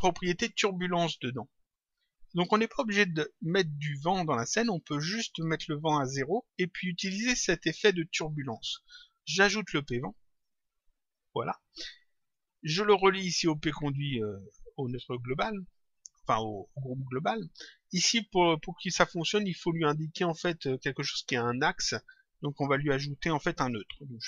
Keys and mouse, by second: 10.3 click, 12.2 click, 14.3 click, 23.8 click.